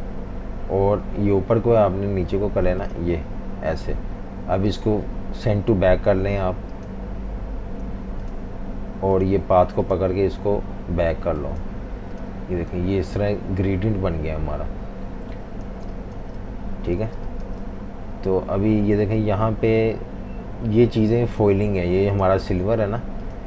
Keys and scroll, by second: 8.0 v, 15.7 v, 15.8 space, 17.0 v, 17.1 space, 21.7 super+3, 22.4 super+3.